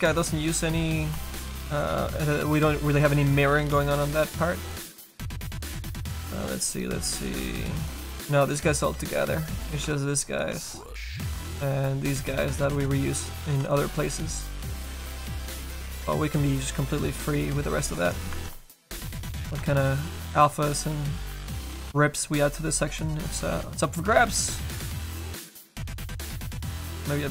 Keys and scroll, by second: 9.8 1, 25.8 s.